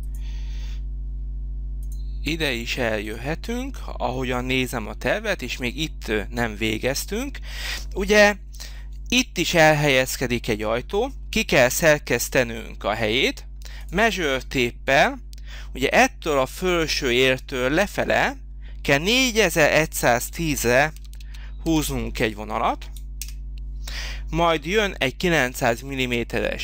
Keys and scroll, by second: 20.2 4, 20.9 1, 21.7 0, 23.2 Return.